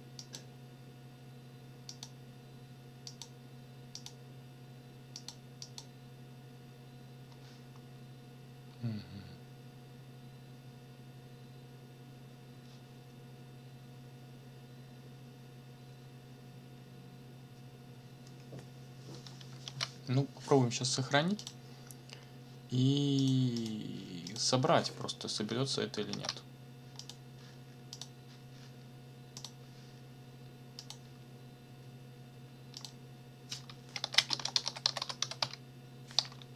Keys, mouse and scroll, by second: 0.2 click, 1.9 click, 3.1 click, 3.9 click, 5.1 click, 5.6 click, 7.9 scroll up 1, 8.6-9.0 scroll up 1, 19.6 ctrl+s, 21.4 click, 23.2 click, 23.6 click, 24.3 click, 26.1 ctrl+c, 27.0 click, 27.9 click, 29.4 click, 30.8 click, 32.8 click, 33.7-36.2 typing.